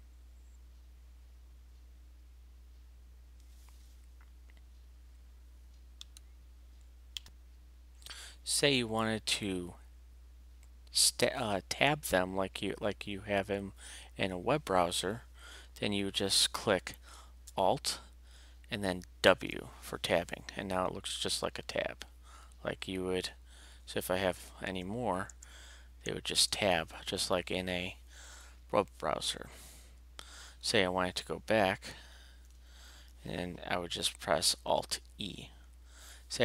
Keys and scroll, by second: 19.2 alt+w, 21.2 alt+Left, 22.2 alt+Right, 22.8 alt+Left, 23.1 alt+Right, 24.6 alt+Return, 26.3 alt+Return, 28.8 alt+Left, 32.4 alt+e.